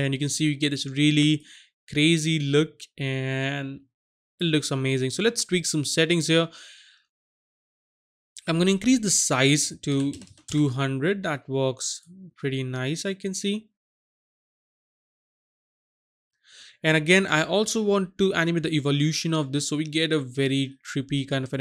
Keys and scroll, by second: 10.0 KP_2, 10.1 KP_0, 10.2 KP_0, 10.4 Return.